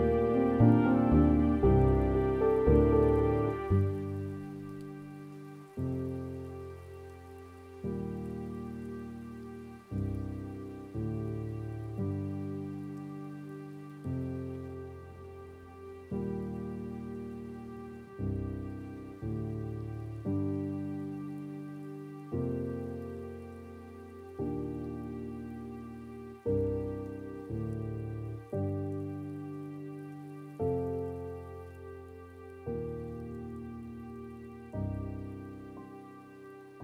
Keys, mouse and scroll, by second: 0.4-8.8 drag, 8.8 scroll down 6, 9.1-10.1 middle drag, 10.1 scroll up 1, 10.1-11.2 middle drag, 11.2-12.1 scroll down 1, 12.1-13.1 scroll down 1, 13.1-18.2 drag, 18.2 middle click, 18.9 scroll down 3, 19.1-19.6 scroll up 6, 19.6 middle click, 20.1 scroll up 1, 20.3-20.9 scroll down 3, 20.9-22.5 middle drag, 22.5 click, 23.5 scroll down 1, 23.6 middle click, 24.0 scroll down 2, 24.3-27.1 middle drag, 27.1-34.0 drag, 34.0-35.4 middle drag, 35.4-36.5 drag, 36.5-36.8 middle drag.